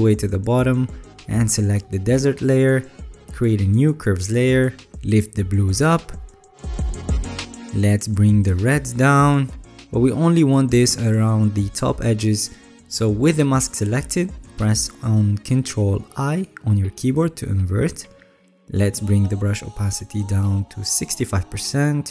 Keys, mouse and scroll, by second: 15.3 ctrl+i.